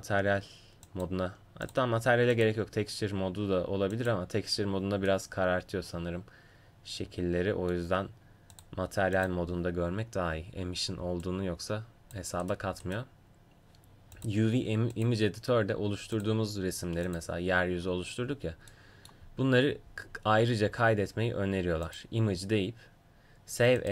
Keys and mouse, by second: 1.1 click, 2.5-4.0 drag, 4.8 click, 5.2-7.0 middle drag, 5.2 right click, 8.6-23.9 drag, 12.5-16.2 right drag.